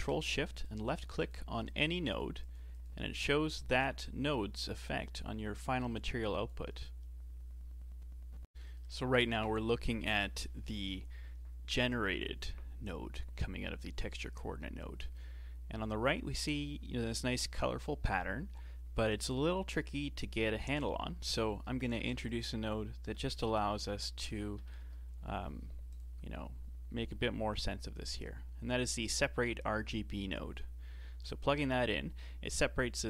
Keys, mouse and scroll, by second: 0.7 ctrl+shift+click, 1.3 ctrl+shift+click, 1.7 ctrl+shift+click, 2.1 ctrl+shift+click, 2.5 ctrl+shift+click, 2.8 ctrl+shift+click, 3.2 ctrl+shift+click, 6.0 click, 8.5-11.5 shift+middle drag, 22.0 shift+a.